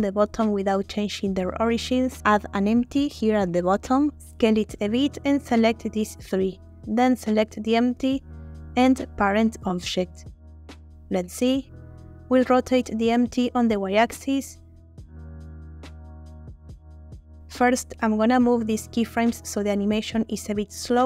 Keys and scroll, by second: 0.6 s, 8.4 ctrl+p, 12.0 y, 15.1 Escape.